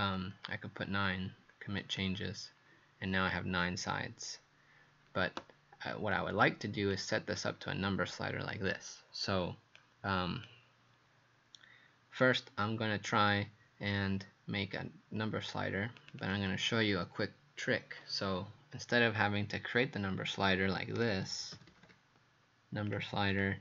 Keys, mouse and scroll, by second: 0.4 KP_9, 1.8 click, 16.2 click, 20.7-22.3 typing, 23.3 click.